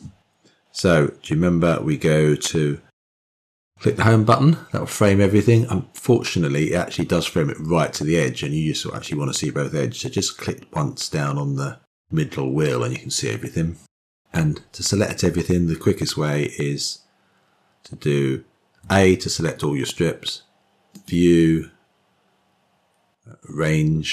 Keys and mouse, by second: 1.7 Home, 11.1-11.5 drag, 20.8-24.1 drag.